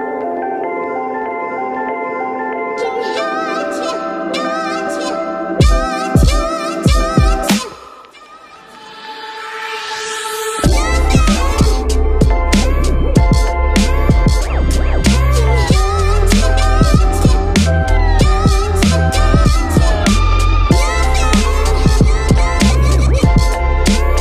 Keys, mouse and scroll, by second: 0.0 space, 6.8 ctrl+-, 8.2 space, 9.7 space, 10.2 ctrl+-, 10.7 right click, 10.9 ctrl++, 12.4 space, 15.1 ctrl++, 16.8 ctrl+-, 16.9 ctrl++, 17.0 space, 18.6 ctrl+-, 18.7 ctrl++, 19.1 space, 19.3 ctrl+-, 19.3 ctrl++, 23.0 space.